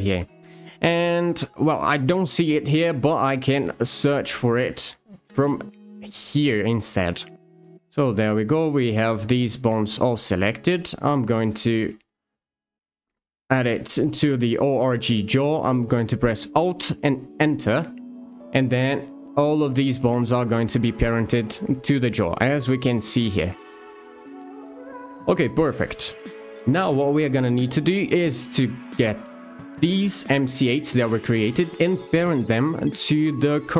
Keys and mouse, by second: 3.8 click, 6.4 shift+click, 8.2 shift+click, 11.7-17.4 drag, 28.5 click.